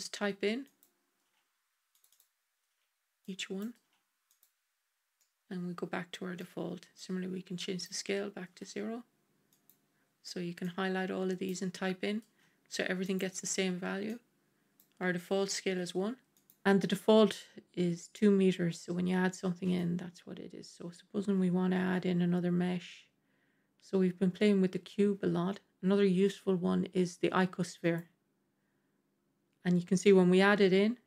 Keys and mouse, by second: 1.1 KP_0, 1.9-4.3 drag, 5.1-6.3 middle drag, 6.8-9.4 drag, 10.5-12.9 drag, 13.9-16.3 drag, 19.2-19.6 middle drag, 21.7 shift+a.